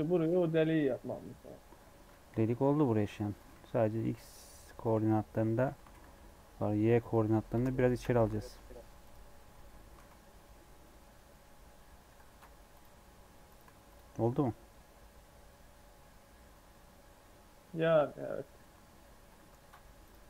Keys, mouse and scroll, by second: 2.1 KP_1, 2.4 KP_3, 3.3 g, 4.9 alt+z, 5.8 g, 7.7 shift+middle click, 8.1 g, 9.5 Tab, 9.9 alt+z, 10.0-10.4 scroll down 2, 10.4 middle click, 11.4 Tab, 11.8 middle click, 12.2 ctrl+r, 13.6 Tab, 13.8 click, 14.0 scroll down 1, 14.2-17.2 middle drag, 18.7 scroll up 3, 19.0 Tab, 19.6 ctrl+r.